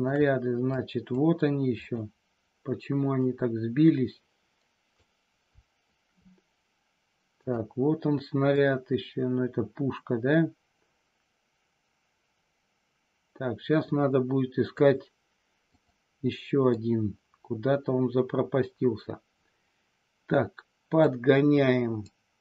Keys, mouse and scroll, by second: 0.8 click, 3.2-4.9 drag, 7.4 click, 8.6-14.8 drag, 16.7-21.0 drag, 22.0-22.4 drag.